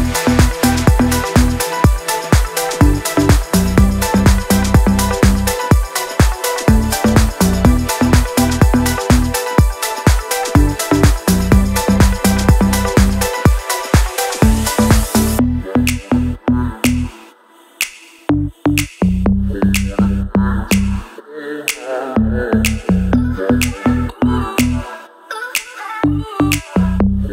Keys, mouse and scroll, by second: 0.5 click, 0.7 Down, 1.1 Right, 1.5 Down, 2.5-2.9 click, 3.1 Down, 4.3-4.7 shift+drag, 5.1 Down, 5.6 Right, 6.1 Down, 6.4 Right, 7.8-9.6 drag, 10.7-11.1 click, 12.1 i, 12.9 click, 20.3 click, 22.1-23.1 drag.